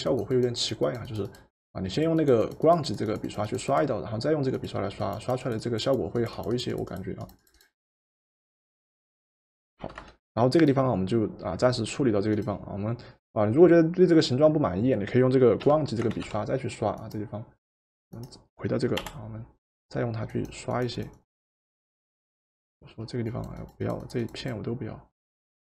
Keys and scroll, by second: 9.8 v, 15.7 b, 16.3 b, 19.0 Return.